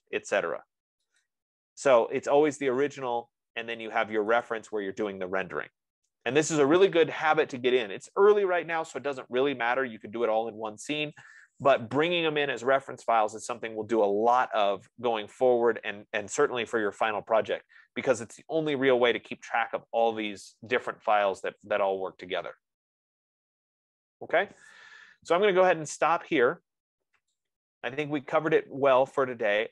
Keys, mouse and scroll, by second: 1.7 click, 5.1 click, 5.9 F15.